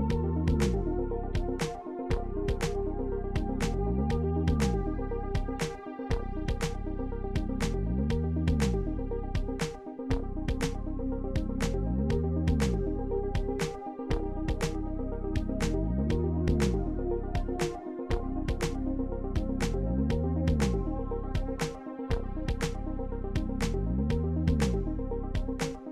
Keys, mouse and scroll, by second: 1.0-1.4 scroll up 2, 1.9 scroll down 2, 2.5 scroll up 2, 3.2 middle click, 3.8 scroll down 2, 4.5 middle click, 5.0-5.4 scroll up 2, 5.4-5.8 scroll down 2, 6.7 middle click, 7.7 middle click, 8.4-8.8 scroll up 2, 9.7 middle click, 12.7 click, 15.0 scroll down 2, 16.4 middle click, 18.7 scroll up 2, 20.0 middle click, 21.8-22.4 scroll up 2, 24.2 click, 24.6 middle click.